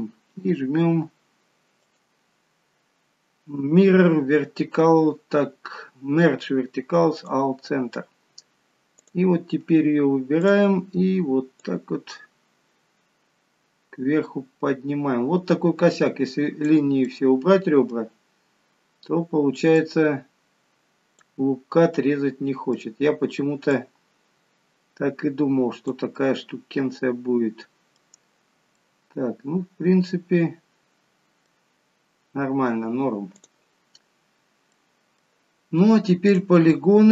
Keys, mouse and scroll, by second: 1.9 right click, 9.1 click, 10.5 click, 17.2 middle click, 19.9 click, 21.6 scroll down 2, 22.1 middle click, 23.8 click, 26.2 middle click, 28.8 middle click, 31.8-33.4 scroll down 5, 33.4 click, 34.0-34.8 scroll up 3, 34.8 middle click, 36.4 click.